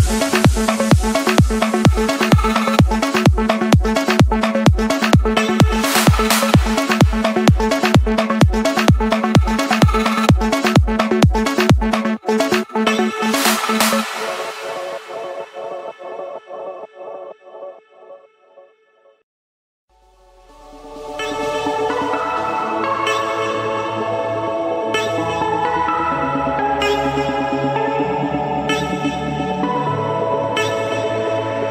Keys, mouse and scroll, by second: 0.1-1.2 scroll down 1, 1.2 scroll down 1, 2.1-2.6 scroll up 2, 2.6-3.0 scroll, 3.6 Escape, 4.1 click, 4.5 click, 6.6-8.1 typing, 13.1-14.3 drag, 15.7 F8, 23.8-24.3 scroll up 2, 24.3-24.7 scroll down 3, 27.9 scroll up 1, 31.0 scroll up 1.